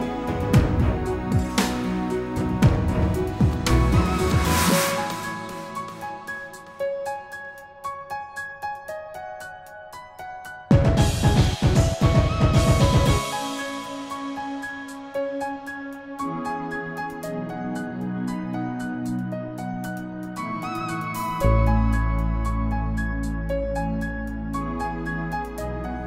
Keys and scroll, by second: 19.1 ctrl+g.